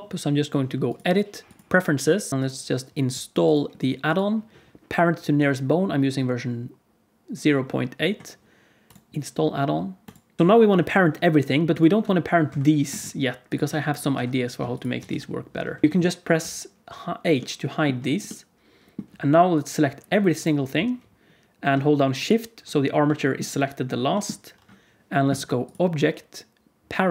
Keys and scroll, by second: 11.9 g, 13.6 g, 15.0 g, 16.3 h.